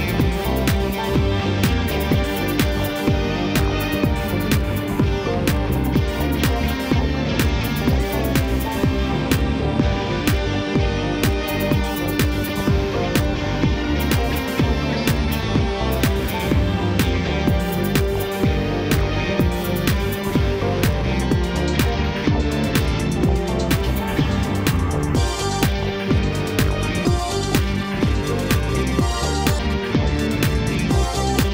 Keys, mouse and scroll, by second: 1.5-1.8 scroll down 2, 1.8-3.0 middle drag, 3.0 KP_1, 3.6 scroll up 2, 4.4 e, 7.1 scroll down 2, 7.4-8.9 middle drag, 8.9 scroll down 3, 9.8 KP_1, 10.8 ctrl+KP_7, 11.5 KP_1, 12.3-14.1 scroll up 2, 14.1 ctrl+KP_8, 14.2 ctrl+KP_8, 15.3 scroll up 1, 17.7 click, 18.9 click, 19.7 shift+click, 20.2-20.7 scroll down 2, 20.9 KP_3, 22.0 e.